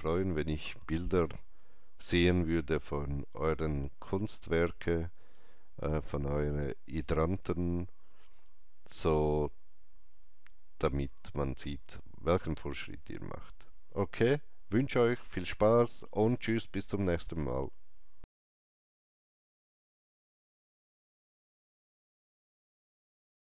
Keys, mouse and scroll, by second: 1.5-9.5 alt+drag, 5.9 alt+right click.